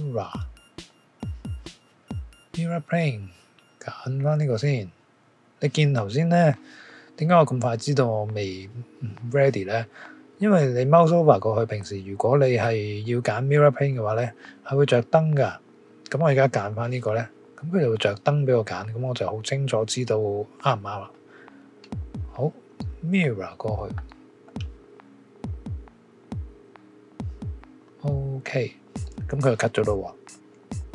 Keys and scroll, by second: 0.0-1.2 typing.